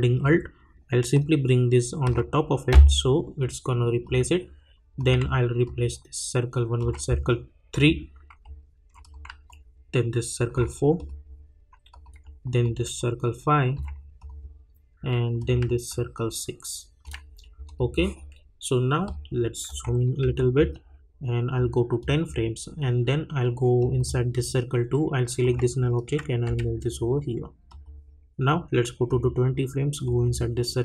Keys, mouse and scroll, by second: 5.6-7.7 alt+drag, 9.0 click, 9.4-10.9 alt+drag, 12.6-14.2 alt+drag, 15.9-17.6 alt+drag, 19.7 -, 20.2 =, 21.5-23.8 drag, 26.4 [, 27.7 click.